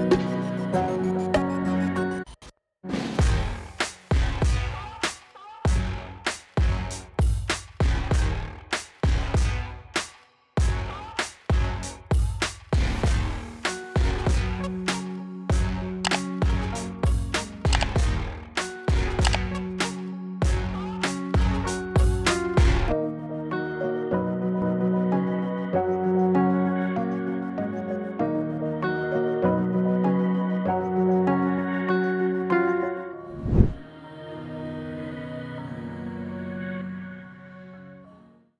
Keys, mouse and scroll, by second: 6.2-6.6 drag, 11.2 space, 21.5 space, 22.2-23.1 click, 23.2 space, 24.0 click, 33.0 click, 33.3 space.